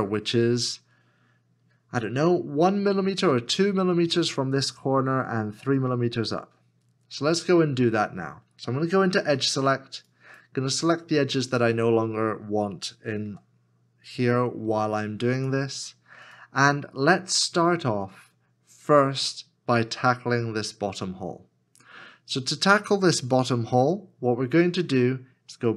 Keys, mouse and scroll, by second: 9.3 2, 11.4 shift+click, 25.1 shift+middle click.